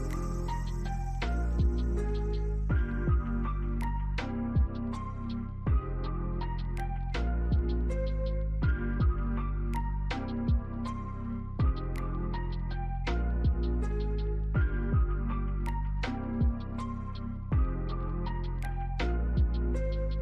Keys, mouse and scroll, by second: 2.5 alt+click, 3.7 alt+scroll up 1, 3.8 alt+middle click, 4.9 double click, 6.8 ctrl+click, 8.9 scroll down 1, 10.5 double click, 11.5 alt+click, 12.0 alt+middle click, 12.6 scroll up 1, 13.1 alt+click, 14.4 scroll up 1, 14.7 alt+click.